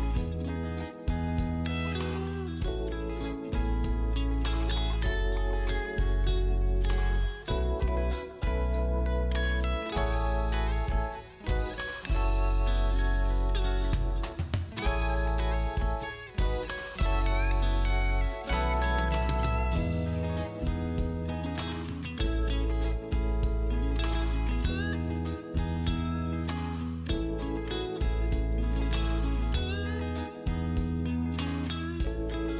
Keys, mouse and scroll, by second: 0.1 ctrl+space, 0.4 scroll down 1, 0.8 click, 4.1 click, 5.9 Delete, 6.3-7.0 scroll down 1, 7.0 click, 7.7-8.5 scroll down 1, 8.5-9.2 scroll up 1, 9.2 click, 10.4 shift+click, 11.9 click, 13.5 right click, 13.9 click, 18.6 g, 19.4 click, 24.9 click, 27.5 click, 30.8 space, 32.3 right click.